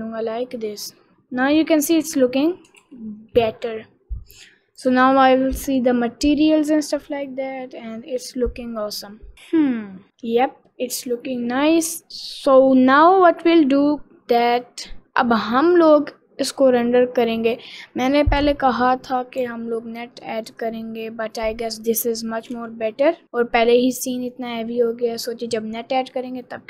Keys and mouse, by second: 3.1 ctrl+s, 9.3 click, 19.8 g, 22.9 g.